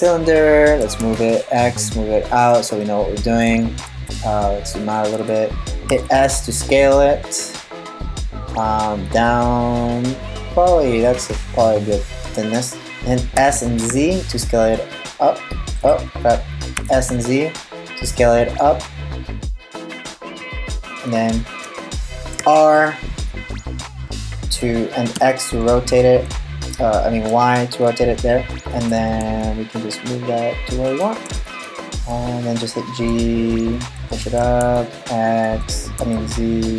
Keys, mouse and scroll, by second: 0.4 g, 2.4 middle click, 3.2-3.6 scroll up 2, 3.6-5.5 shift+scroll down 6, 5.5 s, 12.9 s, 16.4 s, 22.0 r, 28.5 g, 31.0 g, 34.0 g.